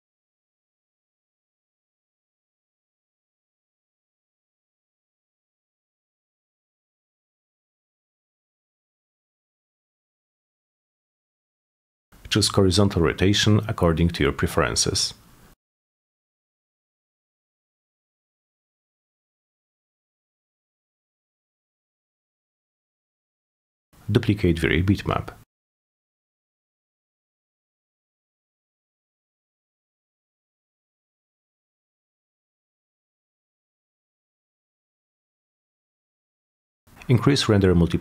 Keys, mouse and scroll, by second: 0.5 m, 1.5-2.0 shift+middle drag, 2.8-3.3 shift+drag, 3.6 shift+click, 5.1 shift+click, 6.3 shift+click, 8.5-9.0 shift+drag, 9.4 shift+click, 9.9 shift+click, 10.1 shift+click, 12.8 shift+click, 13.7-17.2 typing, 16.7 shift+Return, 17.5 Return, 20.3 shift+click, 21.1 shift+click, 21.4 shift+click, 21.8 shift+click, 22.0 shift+click, 23.1 shift+click, 23.5 shift+click, 24.1 shift+click, 25.4 shift+click, 25.7 shift+click, 25.8 shift+click, 27.0 shift+click, 27.8-28.8 typing, 29.6 click, 29.8 click, 31.5 click, 32.1-35.1 typing, 35.6 click, 36.1 click, 36.2 click, 36.9-38.0 drag.